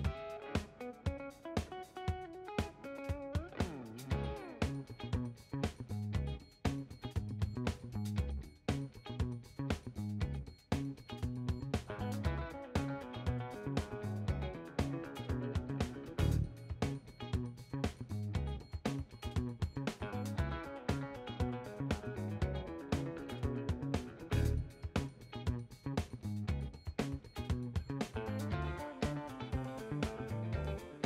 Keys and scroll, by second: 13.7 ctrl+h, 29.7 0, 30.1 ..